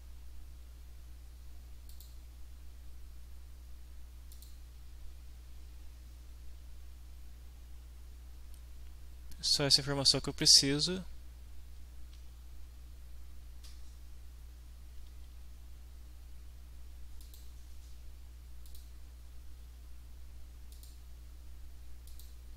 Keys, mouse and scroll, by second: 1.9 click, 4.3 click, 10.4 click, 17.2 click, 18.7 click, 20.7 click, 22.1 click.